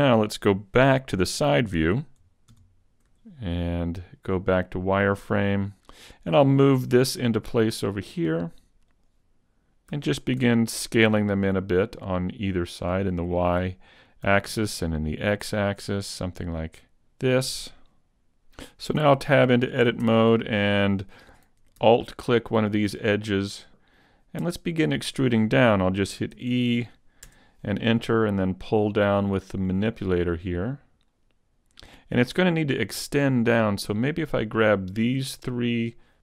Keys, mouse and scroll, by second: 2.5 KP_3, 2.5 KP_3, 3.1 z, 6.8 g, 9.0 click, 9.9 s, 12.7 click, 14.2 s, 17.0 click, 18.7 g, 18.9 Tab, 20.0 ctrl+Tab, 20.3 ctrl+Tab, 22.5 alt+right click, 26.3 e, 28.9 click, 33.0 right click, 33.8 shift+right click, 34.8 shift+right click.